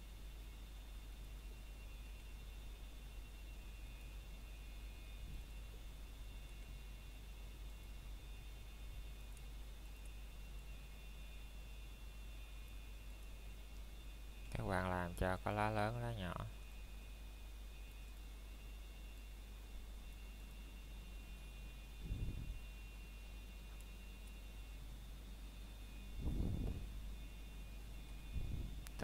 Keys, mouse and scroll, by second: 0.2 scroll up 1, 0.7 middle click, 1.9 scroll down 1, 2.2 middle click, 2.6 scroll up 1, 3.2 middle click, 3.4 scroll down 1, 3.7 middle click, 4.5 scroll up 1, 4.8 shift+middle click, 5.3 scroll down 1, 12.7 scroll down 1, 13.4 shift+middle click, 13.6 scroll up 1, 15.1 click, 16.5 scroll down 1, 16.9 shift+middle click, 17.2 scroll up 1, 18.5 s, 20.4 click, 20.8 scroll down 2, 21.1 shift+middle click, 21.3 scroll up 1, 21.9 scroll down 1, 22.0 shift+middle click, 23.1 e, 25.7 click, 27.0 e.